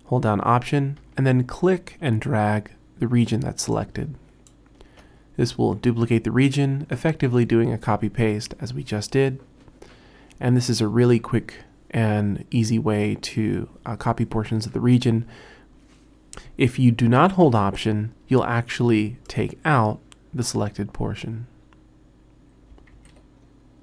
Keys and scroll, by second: 17.7 super+z, 23.0 super+z.